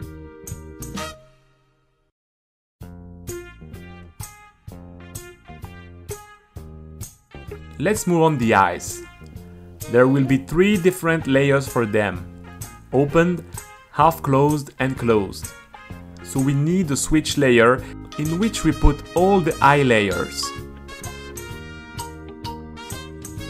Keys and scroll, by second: 0.0-2.7 typing, 4.9 t, 8.1 shift+e, 8.3 Return, 9.0 p, 9.2 Return, 12.4-16.4 typing, 18.3-20.4 typing, 19.2 super+z, 21.6 space, 22.6-23.4 typing.